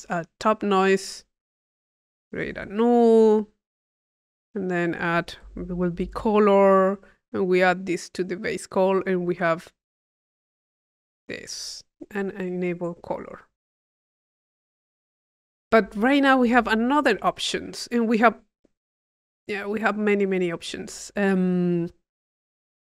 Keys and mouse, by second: 0.4 click, 1.4-2.9 drag, 1.9 Tab, 2.5 u, 3.4 click, 4.0 click, 4.5 click, 7.0 click, 7.5-8.6 drag, 10.3 click, 11.4 click, 12.7 click, 13.2 click, 14.4 click, 16.1-19.1 drag, 17.2-18.7 middle drag, 19.4-22.7 drag, 21.3-22.5 middle drag.